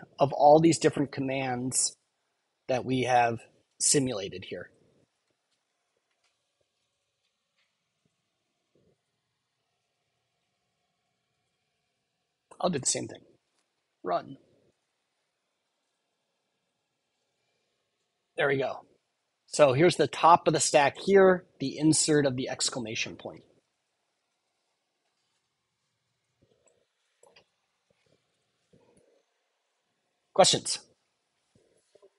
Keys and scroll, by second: 28.1 Return.